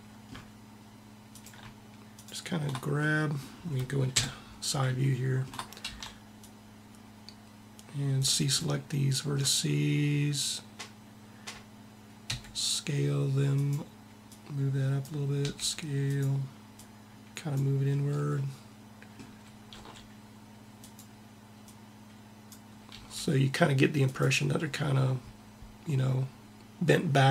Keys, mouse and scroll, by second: 0.7-3.7 drag, 3.8 KP_3, 5.7 c, 12.0 s, 13.9 click, 15.1 s, 19.3 r, 21.3-22.5 drag, 22.5 r, 23.1 middle click.